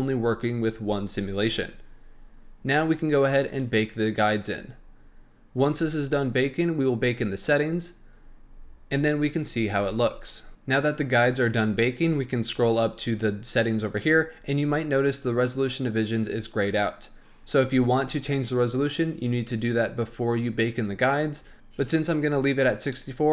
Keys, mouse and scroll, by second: 3.4-10.5 drag, 11.5-15.4 scroll up 10, 17.3-18.1 scroll down 5, 18.1-19.2 scroll up 1, 19.2-20.9 scroll down 8, 21.3-23.3 scroll up 8.